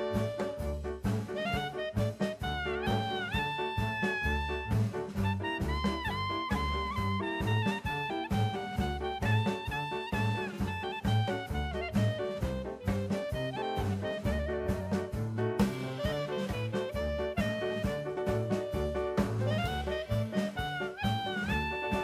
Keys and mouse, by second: 1.8 KP_0, 3.9-5.4 drag, 10.2-14.8 drag, 11.0 KP_0, 15.2 click, 19.4 click.